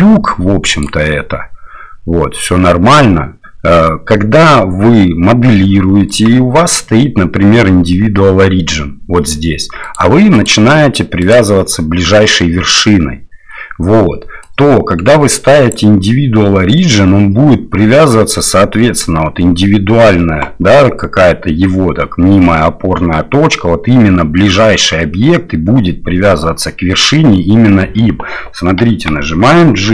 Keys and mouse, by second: 0.8-6.2 drag, 10.3-13.6 drag, 14.5-15.7 drag, 28.9 g.